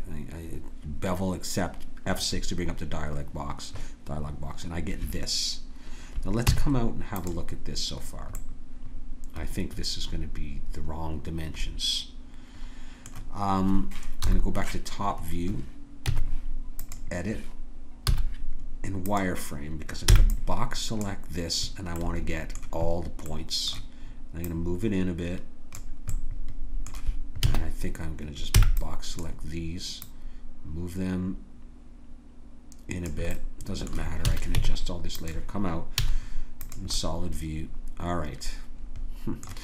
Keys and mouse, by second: 6.5 Tab, 14.2 KP_7, 16.1 Tab, 18.1 z, 20.1 b, 22.0-23.8 drag, 24.5-26.7 drag, 27.5 a, 28.6 b, 30.0 click, 33.3-35.1 right drag, 34.3 a, 34.6 Tab, 35.9 z.